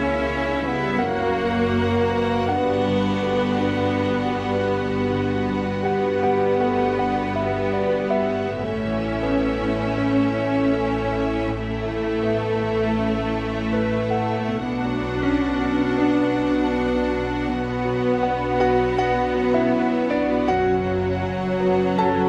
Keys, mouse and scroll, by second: 0.0 g, 0.1 click, 0.9 g, 2.6 click, 5.2 click, 7.2 click, 8.8 click, 9.7-10.6 drag, 13.4-14.1 drag, 14.2-15.6 drag, 15.6 0, 16.5-18.9 drag, 19.9-21.8 drag.